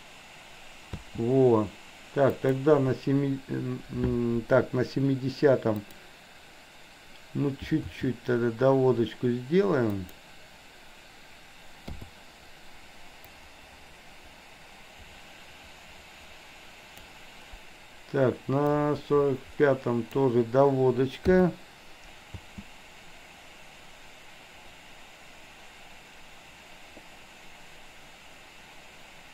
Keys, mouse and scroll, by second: 0.9 space, 2.4 click, 5.8 click, 7.9 r, 11.9 i, 13.3-17.1 drag, 18.9-20.3 drag, 21.3 i, 22.4 space.